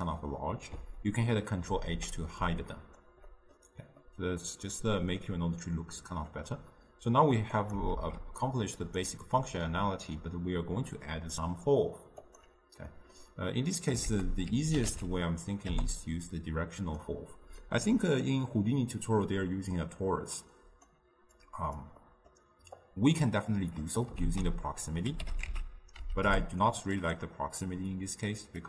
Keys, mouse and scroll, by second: 1.8 ctrl+h, 4.2-8.1 middle drag, 8.1 shift+d, 10.7-15.8 middle drag, 15.8 ctrl+a.